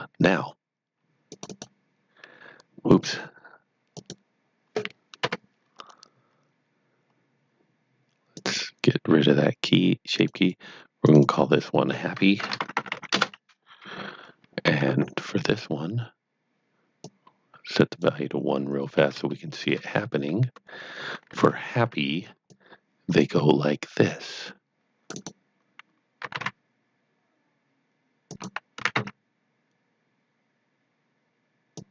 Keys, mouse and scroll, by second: 1.3 click, 1.5 double click, 3.9 click, 5.2 Delete, 8.3 click, 10.1 click, 10.4 double click, 11.0 click, 11.2 double click, 12.2-13.4 typing, 14.6 Tab, 17.0 click, 19.3 shift+middle click, 20.0 scroll up 1, 22.4 click, 24.8 click, 25.1 right click, 26.0-26.8 typing, 28.4 click, 28.8 typing, 31.0-31.9 typing, 31.7 click.